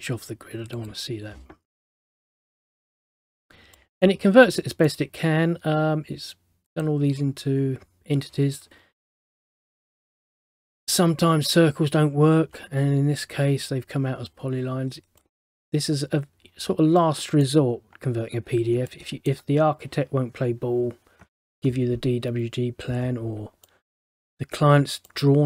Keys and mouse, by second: 0.9 click, 3.9 middle click, 4.7 middle click, 6.8 click, 10.3 middle click, 15.3 middle click, 17.1 middle click, 19.0 middle click, 23.8 middle click, 25.2 middle click.